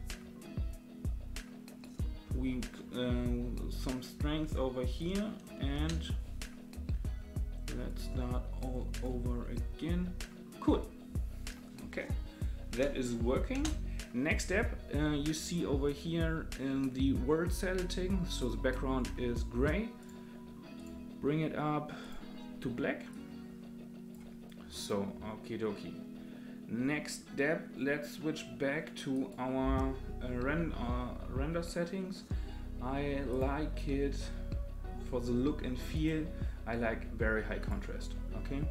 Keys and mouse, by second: 5.7 space, 7.9 click, 8.9 click, 13.6 space, 20.0-20.8 drag, 22.0 click, 24.8 click, 29.2 click, 35.9-37.7 drag.